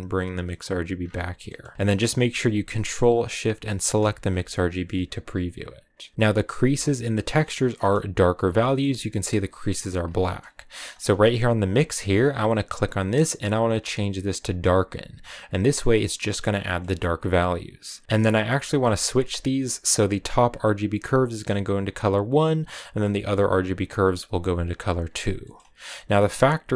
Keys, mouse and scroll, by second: 3.8 ctrl+shift+click, 4.6-6.1 middle drag, 6.1 click, 6.8 ctrl+shift+click, 8.3 middle click, 8.3-9.8 scroll up 3, 9.8-10.4 scroll down 1, 10.4-10.9 scroll up 4, 11.5 ctrl+shift+click, 13.6-16.6 drag, 16.6-18.0 middle drag, 18.0 ctrl+z, 19.4 scroll down 3, 20.0-22.1 drag, 23.3 click, 26.2-26.7 drag.